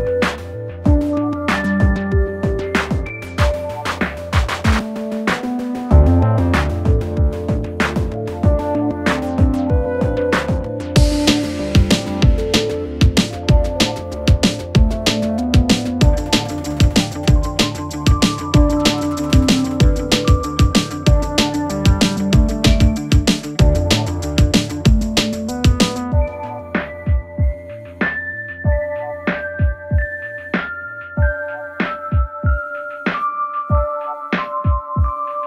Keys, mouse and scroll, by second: 3.5 click, 3.8-4.1 scroll up 2, 4.1 scroll down 2, 4.3-4.7 scroll up 1, 4.9 click, 5.1 click, 5.7 s, 6.7 s, 7.4 click, 8.1 Tab, 8.3 click, 8.6 click, 9.1 3, 9.2 click, 10.0 i, 11.7 click, 12.2 2, 12.3 click, 13.0 shift+click, 13.6 s, 16.1 click, 16.6 click, 17.2 click, 18.1 click, 22.0 click, 28.2 click, 28.5 scroll up 3, 28.7 scroll down 3, 29.0 click, 29.4 click, 31.3 Tab, 31.9 s, 33.0 click, 33.6 click.